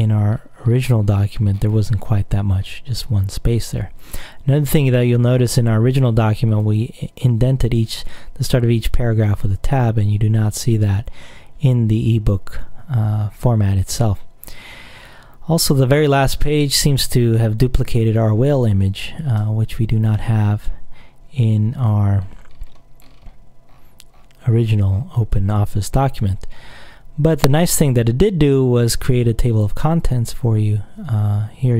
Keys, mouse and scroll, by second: 0.5-1.4 scroll down 1, 1.4-2.4 scroll down 1, 2.8-3.3 scroll down 1, 5.5 click, 7.6-8.0 scroll down 1, 9.7 alt+Tab, 13.1-13.7 scroll down 2, 13.7 scroll down 1, 13.9-15.2 scroll up 2, 15.2 scroll up 1, 15.2-16.2 scroll down 1, 17.7 click, 18.7-19.2 scroll down 1, 19.2-20.0 scroll up 1, 20.7-21.2 scroll down 1, 22.0 click, 22.4-23.1 scroll down 2, 23.1-23.9 scroll down 1, 23.9-26.1 scroll up 2, 26.1 alt+scroll up 1, 26.2 alt+Tab, 26.8-27.4 scroll down 2.